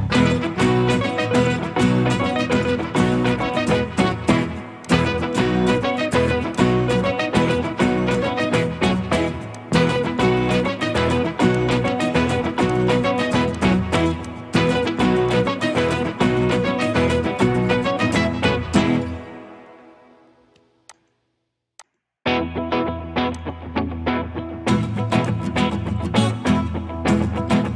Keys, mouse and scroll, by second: 2.6 right click, 2.6 middle click, 5.4 middle click, 10.9-11.9 scroll up 1, 16.9 middle click.